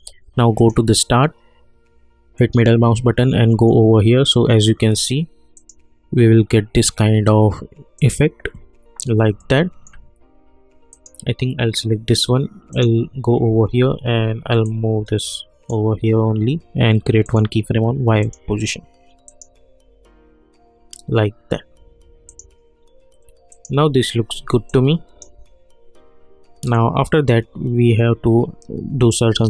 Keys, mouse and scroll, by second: 2.3 middle click, 4.1 scroll down 1, 5.5 click, 7.9 click, 9.4-10.9 alt+middle drag, 10.9-17.2 drag, 22.2 click, 24.7 alt+click, 25.7-27.9 scroll up 1.